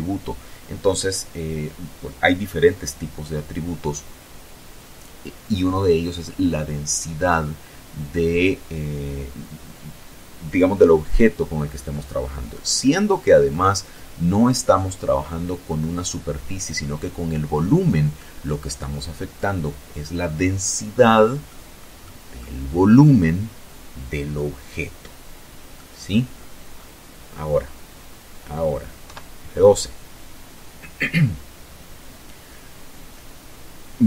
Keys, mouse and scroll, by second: 10.5-11.6 middle drag, 11.8-12.9 middle drag, 16.2 middle click, 16.8 click, 19.4 click, 23.8 click, 24.3-25.0 scroll down 4, 27.0 F12.